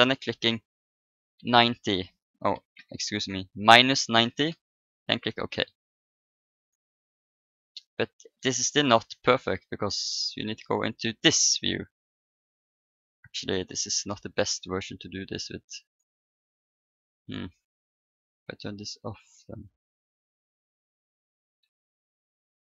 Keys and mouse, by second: 6.0-7.9 drag, 7.0 right click, 7.9-10.2 middle drag, 10.2-11.9 drag, 11.9-15.5 middle drag, 15.8-17.6 right drag, 18.6-21.9 drag, 21.3 Tab.